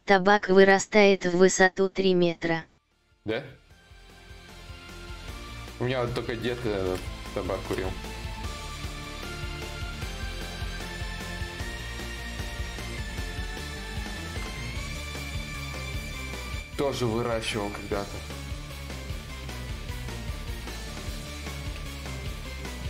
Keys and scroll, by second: 18.6 x, 21.9 ctrl+z.